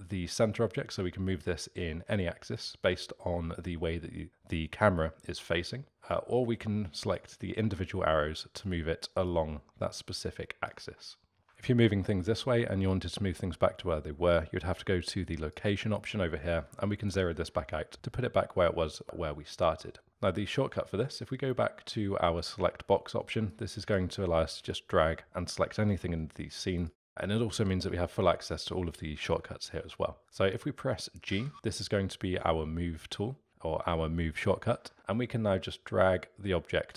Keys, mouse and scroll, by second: 5.2-11.4 drag, 15.5 click, 20.1 click, 22.4 click, 23.5 click, 24.1 click, 24.7 drag, 26.7 click, 26.9 ctrl+z, 31.3 g.